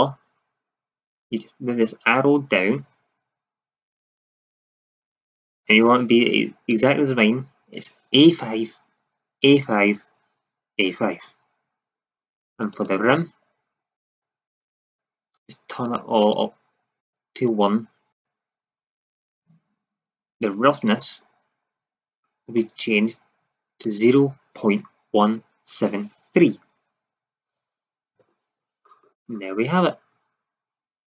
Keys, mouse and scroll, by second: 12.6-14.6 drag, 20.8-22.8 drag, 29.7 click.